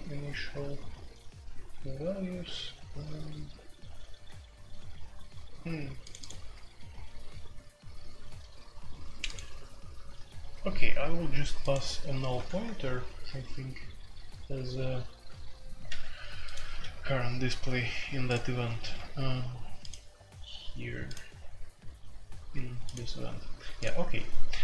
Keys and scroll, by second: 12.3 typing, 15.8 ctrl+w, 16.6 ctrl+w.